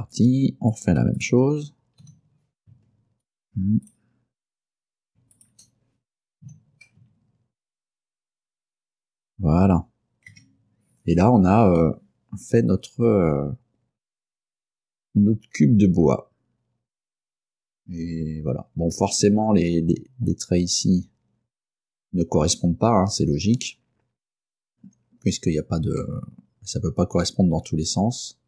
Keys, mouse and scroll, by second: 0.2 click, 0.8 shift+middle click, 1.3 shift+middle click, 1.3 shift+right click, 2.1 g, 3.3 ctrl+click, 4.0 ctrl+right click, 5.4 shift+right click, 6.5 g, 8.2 ctrl+click, 10.4 Tab, 11.3 scroll down 2, 11.9 middle click, 12.0 scroll up 1, 21.0-21.4 scroll up 1, 23.9 scroll down 2, 26.1-28.4 middle drag.